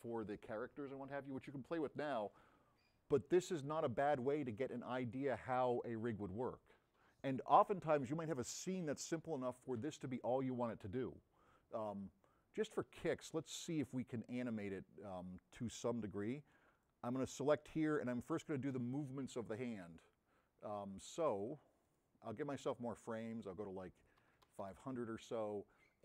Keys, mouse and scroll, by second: 15.8 middle click, 16.8-17.3 middle drag.